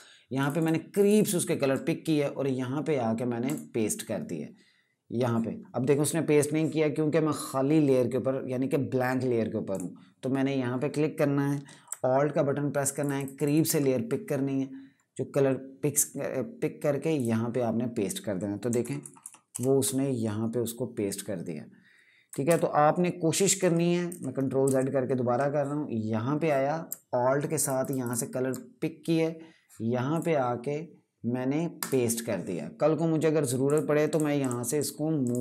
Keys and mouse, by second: 0.1 click, 0.3 click, 0.7 click, 0.9 click, 3.2 click, 12.7 click, 12.9 click, 13.1 click, 13.2 click, 15.6 click, 18.5 KP_Subtract, 19.2 KP_Add, 22.0 KP_Add, 23.3 ctrl+z, 23.8 typing, 24.4 KP_Add, 27.3 alt+click, 27.5 alt+click, 27.7 alt+click, 29.8 click.